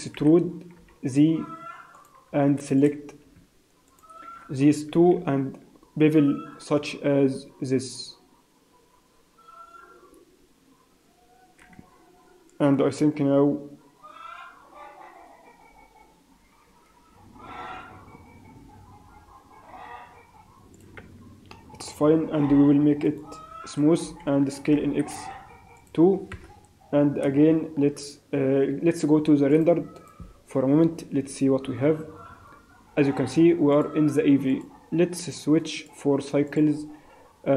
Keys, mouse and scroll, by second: 0.1 e, 2.7 click, 3.9 shift+click, 4.9 ctrl+b, 21.0 Tab, 21.5 middle click, 22.6 t, 23.0 right click, 24.0 t, 24.6 s, 26.3 KP_0, 29.9 click, 30.1 click, 33.7 click, 34.5 click, 35.7 click.